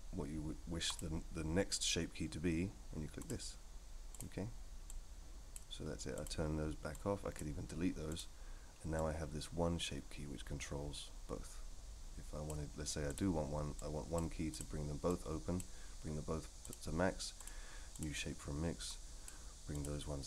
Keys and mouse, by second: 0.9-3.3 drag, 4.1 click, 4.9-5.5 drag, 6.1 click, 7.0 click, 8.1 click, 8.9-12.5 drag, 13.1 click, 13.8 click, 14.5 click, 15.1-15.6 drag, 16.7-17.4 drag, 17.9 click, 18.9 click, 19.7 click.